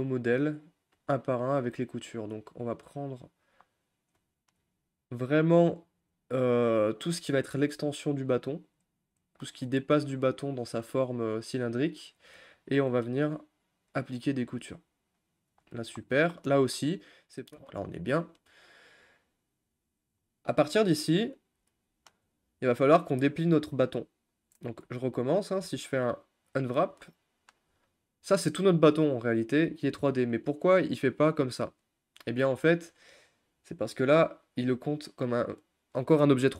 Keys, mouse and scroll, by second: 1.5-2.1 scroll up 1, 2.1 click, 3.4 shift+click, 3.6-5.3 middle drag, 5.3 shift+click, 5.6 middle click, 6.5 shift+click, 6.7-7.8 middle drag, 7.8 scroll up 1, 7.8-8.8 middle drag, 8.8 shift+click, 9.2 shift+click, 9.4 middle click, 10.3 shift+click, 10.6 shift+click, 10.8-12.2 middle drag, 12.2 shift+click, 14.3 u, 14.8-16.3 shift+middle drag, 16.3 scroll up 2, 16.5-20.0 middle drag, 20.0 scroll up 2, 20.5 middle click, 21.2 scroll up 2, 21.8-23.9 shift+middle drag, 23.9-24.8 scroll down 4, 24.8 a, 26.7 u, 31.8 click, 32.9-33.9 middle drag, 33.9-35.9 scroll down 1.